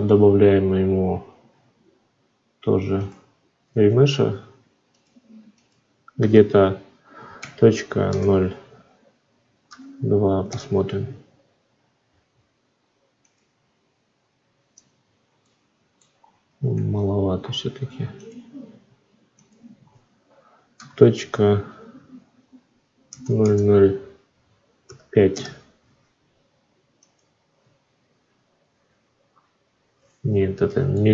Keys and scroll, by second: 3.7 ctrl+z, 10.3 Return, 16.6 ctrl+z, 25.1 Return.